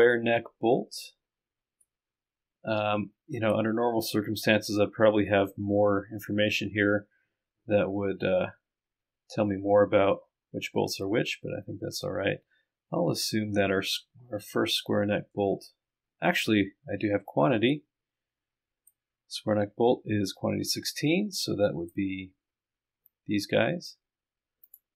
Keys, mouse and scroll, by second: 11.1-12.3 scroll down 2, 12.3-12.8 scroll up 2, 12.8-13.5 scroll down 2, 13.9-15.1 scroll up 2, 24.7 click.